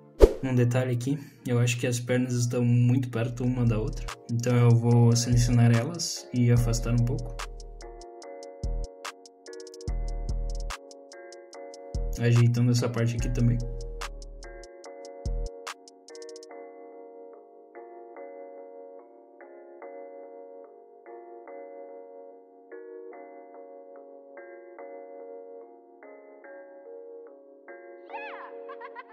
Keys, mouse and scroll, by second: 0.0 middle click, 0.5 Tab, 0.5 click, 0.5 middle click, 0.9 middle click, 2.3 middle click, 2.8 z, 3.5 click, 4.6 shift+click, 5.7 ctrl+click, 6.2 middle click, 6.5-6.9 scroll up 3, 6.8 middle click, 7.4 middle click, 7.8 middle click, 8.4 click, 9.1 ctrl+z, 9.4 click, 10.6-11.0 scroll down 3, 10.8 middle click, 11.7 alt+click, 12.0 middle click, 12.6 shift+click, 12.7 middle click, 13.2 alt+shift+click, 13.5 middle click, 14.1 shift+middle click, 14.4 scroll up 3, 14.5 middle click, 15.1 shift+middle click, 15.6 middle click, 16.0 scroll down 2, 16.2 middle click, 16.7 click, 18.6 middle click, 18.6 scroll down 1, 18.7 middle click, 19.5 middle click, 20.1 scroll up 2, 20.4 middle click, 21.7 click, 23.4 shift+click, 24.6 middle click, 25.1 click, 26.2 middle click, 26.6 scroll up 2, 26.7 alt+click, 26.9 middle click, 27.5 scroll up 2, 27.7 shift+middle click, 28.6 alt+shift+click.